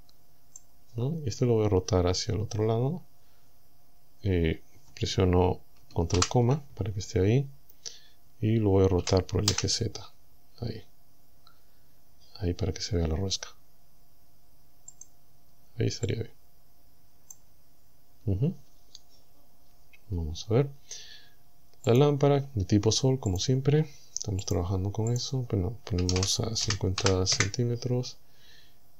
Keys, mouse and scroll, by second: 6.2 ctrl+,, 9.0 r, 9.5 z, 15.0 click, 16.1-17.6 drag, 21.9 click, 23.4 click, 24.5 click, 25.2 click, 26.0 KP_5, 26.2 KP_0, 26.6 c, 27.0 m, 27.4 KP_Enter.